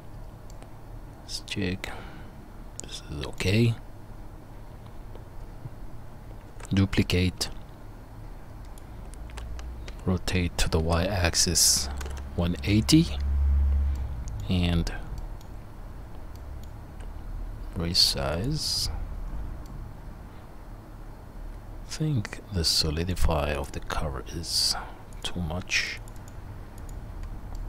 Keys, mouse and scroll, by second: 6.5 shift+d, 8.9-20.8 middle drag, 9.9 r, 16.9 s, 21.3 middle click, 22.3-23.5 middle drag, 23.5 click, 23.6-25.2 middle drag, 25.2-27.6 drag.